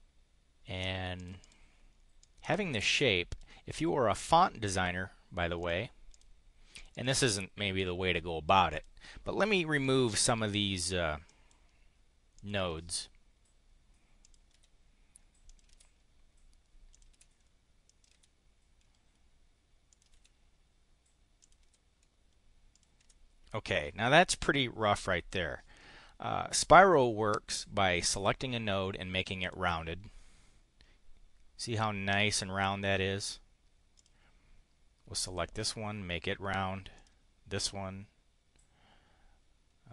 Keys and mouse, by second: 1.2 click, 1.4 click, 2.2-3.4 drag, 5.6 click, 6.0 click, 6.7 click, 8.6 click, 10.0 Delete, 11.2 click, 12.3 click, 12.6 Delete, 14.2 click, 14.4 Delete, 15.4 click, 15.6 Delete, 16.8 click, 17.0 Delete, 17.8 click, 18.0 Delete, 19.8 click, 20.1 Delete, 21.4 click, 21.6 Delete, 22.7 click, 23.0 Delete, 28.0 click, 29.4 click, 33.9 click, 35.2 click, 36.9 click.